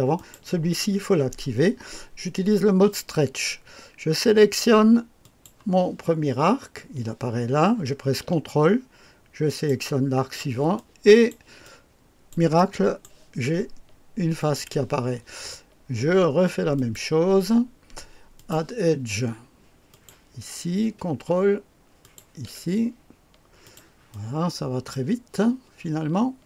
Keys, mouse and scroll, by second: 0.2 click, 5.2 click, 9.5 ctrl+click, 10.8 click, 11.6 click, 12.5 click, 12.6 middle click, 13.2 right click, 14.4 click, 16.7 click, 18.4 click, 19.9 click, 22.0 ctrl+click, 23.6 click, 24.1-25.3 drag.